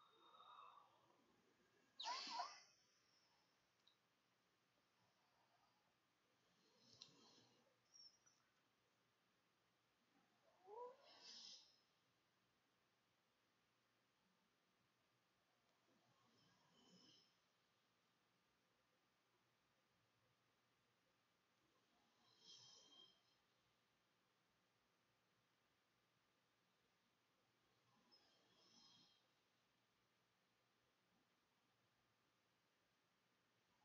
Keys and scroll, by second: 16.5-17.4 typing, 21.3 i, 22.4 t, 23.2 e, 26.1 Tab, 26.5-31.1 typing.